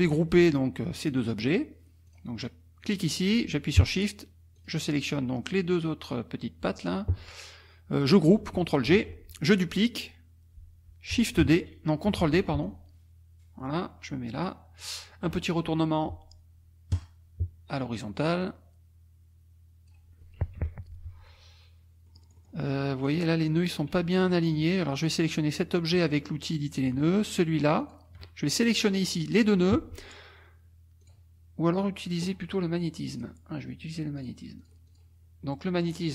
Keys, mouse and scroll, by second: 1.0 shift+click, 2.1 click, 2.8 click, 4.6 shift+click, 8.9 ctrl+g, 11.4 shift+d, 12.6 ctrl+d, 12.6-15.0 ctrl+drag, 16.9 click, 18.4-20.1 drag, 20.6 F2, 22.1 middle click, 22.1-22.7 scroll up 2, 23.1 click, 24.1 shift+click, 24.8 shift+click, 25.3 shift+click, 27.8 shift+click, 28.4 shift+click, 31.0 click, 33.1 click, 33.8 click, 34.2 click, 34.6 click.